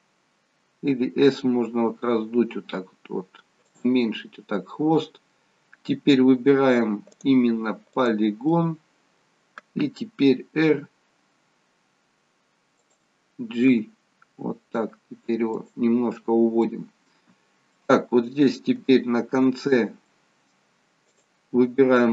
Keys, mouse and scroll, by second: 4.0 middle click, 5.4 middle click, 7.2 click, 8.3 click, 8.5 middle click, 10.7 r, 13.9 g, 16.1-16.7 scroll down 1, 16.7 middle click, 16.7 scroll down 1, 17.3-18.3 scroll down 2, 17.8 middle click, 18.8 shift+middle click, 19.7-20.3 scroll up 3, 20.1 middle click, 21.1 click.